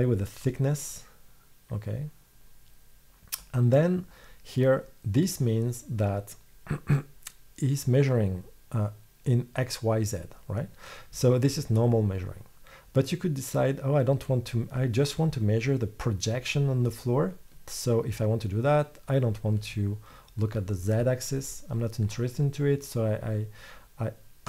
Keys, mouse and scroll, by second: 14.3 middle click.